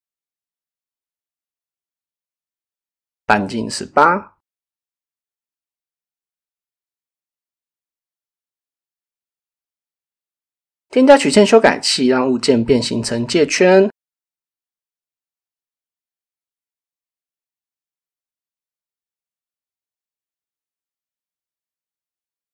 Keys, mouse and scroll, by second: 2.2-4.1 drag, 6.6 click, 7.4 click, 8.6 click, 10.3 click, 16.4 middle drag, 17.0 KP_7, 19.1 middle click, 19.8 KP_1, 21.6 middle click.